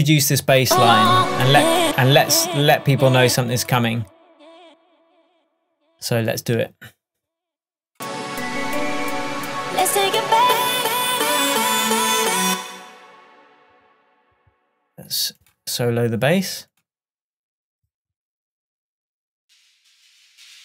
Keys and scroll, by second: 1.9 space, 12.5 space.